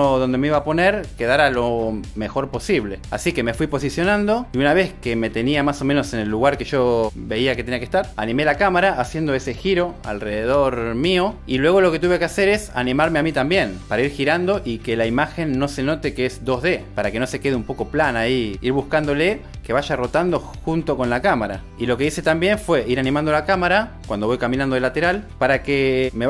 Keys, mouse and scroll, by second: 1.0 g, 1.7 g, 4.5 s, 10.1 Right, 16.9 g, 18.5 click, 21.7 g, 25.3 i, 26.0 space.